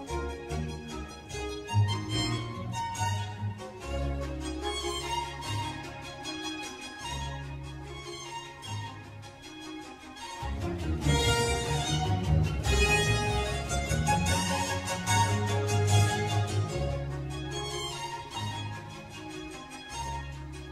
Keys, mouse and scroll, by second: 2.3-4.6 typing, 5.3 Return, 5.7-8.7 typing, 10.8 o, 11.8-13.6 typing, 16.4 Tab, 17.6 click, 18.5 scroll down 1, 20.0 click.